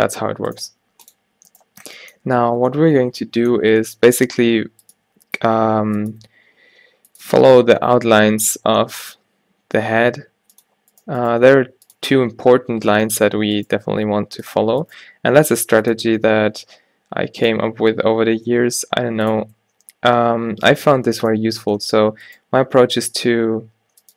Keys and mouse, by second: 0.8 x, 4.1 g, 5.0 e, 6.2 e, 7.5 e, 9.2 shift+e, 9.8 e, 11.4 g, 12.1 a, 12.2 a, 14.1 g, 15.0 g, 16.1 a, 16.3 a, 17.7 g, 19.4 Tab, 20.6 Tab, 21.5 a, 22.1 a, 22.8 e.